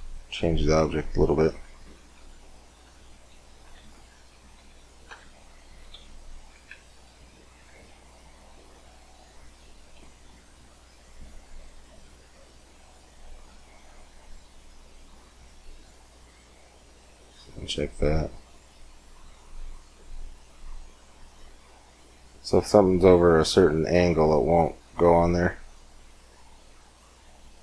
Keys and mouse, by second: 2.5 Tab, 3.3 z, 3.6 a, 3.7 a, 4.4 a, 4.9 Tab, 5.8 b, 6.2-8.0 drag, 6.4 a, 6.8 b, 7.6 g, 10.3 z, 11.5 Tab, 16.8 middle click, 17.0-22.8 drag, 22.8-24.7 middle drag, 25.1-27.6 drag.